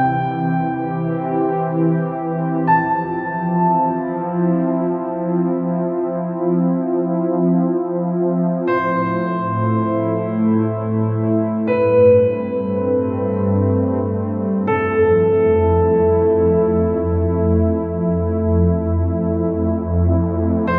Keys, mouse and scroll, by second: 2.3-4.5 middle drag, 4.3-6.0 drag, 6.0-7.7 middle drag, 8.6-10.4 drag, 11.1-12.9 drag, 13.9-15.7 middle drag, 16.4-18.3 drag, 18.7-20.7 middle drag.